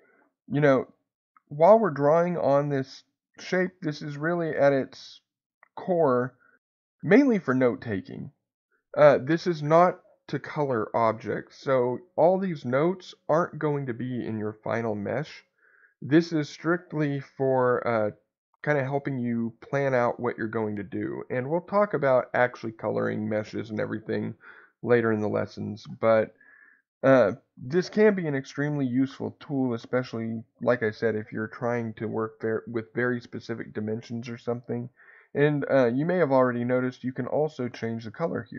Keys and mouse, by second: 4.3-7.9 middle drag, 14.4-17.2 middle drag, 18.3-21.2 middle drag, 28.1 middle click, 36.8 click.